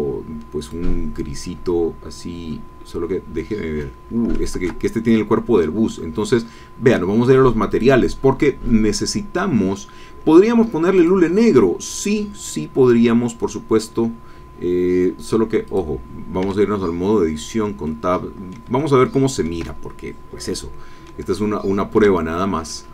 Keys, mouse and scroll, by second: 0.6 click, 1.4-1.8 scroll down 1, 2.1-2.9 scroll up 2, 4.5 ctrl+z, 7.7 click, 11.0 click, 13.4 scroll down 2, 14.0-14.5 scroll up 2, 14.5 scroll down 2, 15.6 click, 16.5 Tab, 17.3-17.6 scroll down 2, 17.8 click, 18.7 shift+click, 20.5 middle click, 21.4 shift+middle click, 22.2-22.5 shift+scroll down 1, 22.7-22.9 middle drag.